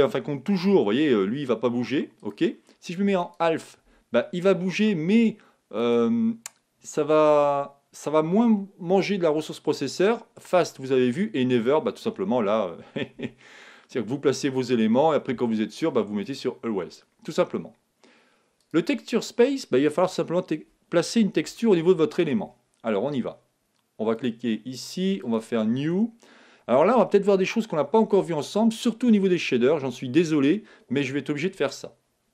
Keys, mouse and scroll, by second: 0.6 g, 2.3-4.9 drag, 3.8 g, 5.9-7.7 drag, 10.5-13.3 drag, 13.3 g, 16.2-18.1 drag, 18.5-20.5 drag, 21.5-23.4 middle drag, 24.2-27.1 drag.